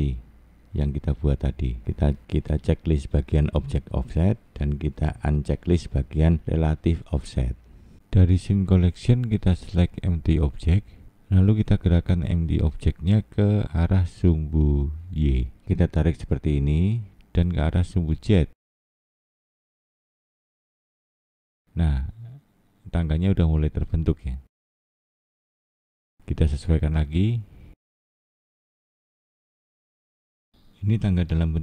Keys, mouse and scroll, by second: 1.9 click, 3.4 click, 4.0 click, 6.4 click, 9.9 click, 10.9 scroll up 5, 14.5 scroll down 2, 15.6 click, 20.7 click, 23.1-23.9 scroll down 7, 24.3-24.9 scroll up 1, 24.9 middle click, 26.4 click, 29.2 click, 30.8-31.3 scroll down 1, 31.4 middle click.